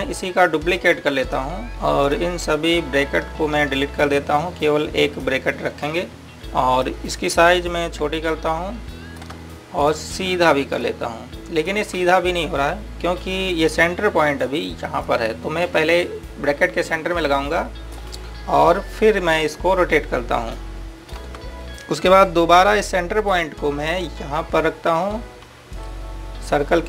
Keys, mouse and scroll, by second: 1.7 click, 2.3 right click, 3.0 click, 6.3 Delete, 6.7 click, 7.0 Delete, 7.5 click, 9.1 click, 10.7 click, 14.1-15.7 scroll up 1, 15.7 click, 24.2 click.